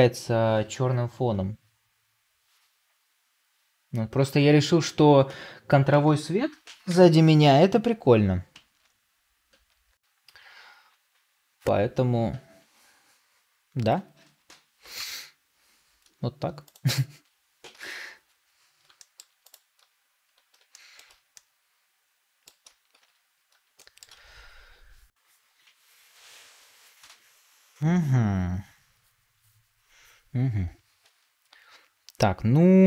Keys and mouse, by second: 17.6 KP_Divide, 18.9 middle drag, 20.6 middle drag, 21.2-22.4 middle drag, 22.9 ctrl+s, 23.7 shift+middle click.